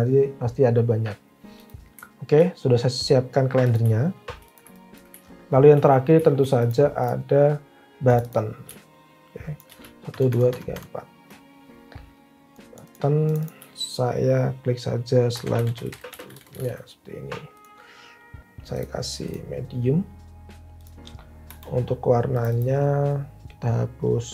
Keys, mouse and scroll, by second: 10.0 shift+Down, 10.3 shift+Down, 10.5 shift+Down, 10.8 shift+Down, 15.0-17.1 typing, 18.8 typing, 21.4 Delete, 23.2 typing.